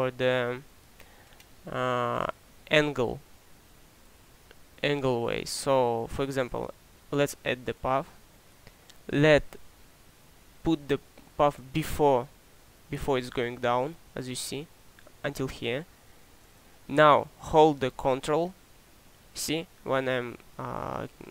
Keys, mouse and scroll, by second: 0.0 click, 1.5 click.